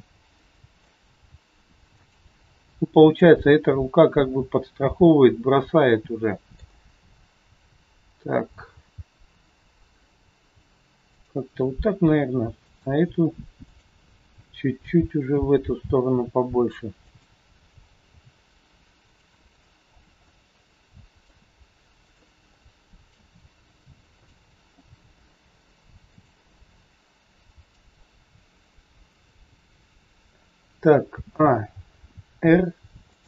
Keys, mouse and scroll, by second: 0.5 middle click, 1.0 g, 3.1 click, 3.6 scroll down 1, 4.0 middle click, 11.1 g, 11.6-12.2 scroll up 3, 12.6 click, 13.6 shift+click, 14.7 g, 19.1 r, 19.8 scroll down 3, 20.2 middle click, 22.0 click, 22.5 middle click, 23.4 r, 24.8 g, 26.5 middle click, 28.1 scroll down 2, 31.4 a, 33.1 r.